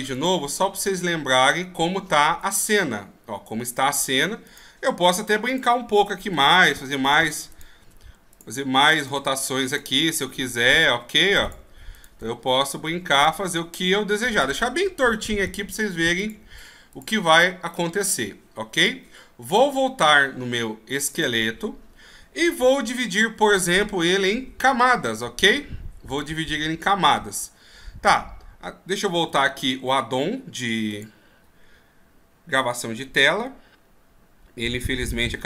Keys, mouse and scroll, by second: 31.6-32.6 scroll down 11, 32.6-35.4 scroll down 5.